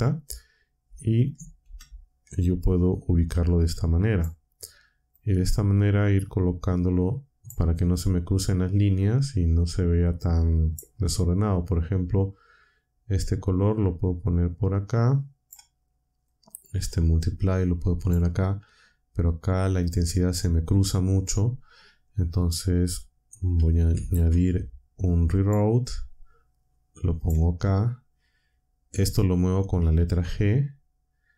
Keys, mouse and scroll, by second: 1.6 g, 4.1 click, 5.1-7.6 drag, 8.7-10.9 drag, 11.9-15.6 drag, 16.2-18.2 drag, 22.4 click, 23.9 shift+a, 25.4 click, 27.2 click, 30.0 g.